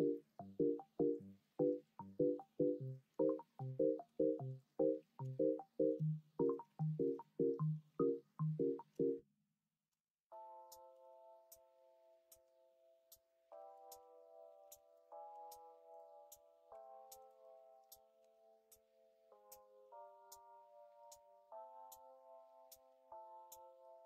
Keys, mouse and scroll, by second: 4.0 2, 5.5 middle click, 7.4 shift+middle click, 10.4 shift+middle click, 13.4 2, 14.6 3, 15.2 x, 16.7 1, 18.2 ctrl+b.